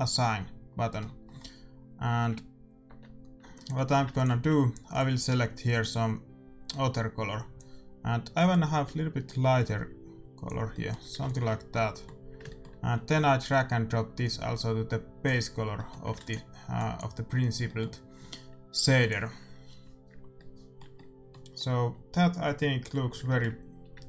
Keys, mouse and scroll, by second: 2.8 Tab, 3.4 Tab, 3.6-5.9 middle drag, 4.0 ctrl+s, 4.8-6.7 drag, 10.6-14.3 middle drag, 11.1 ctrl+s, 13.4-15.3 drag, 15.7-20.1 middle drag, 16.1 ctrl+s, 16.7-18.6 drag, 18.8 ctrl+s, 20.3-22.5 middle drag.